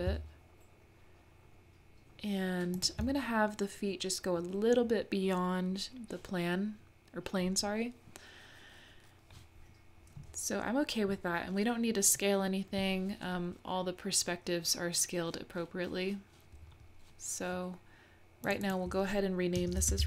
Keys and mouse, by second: 18.5 click, 18.7-20.0 drag.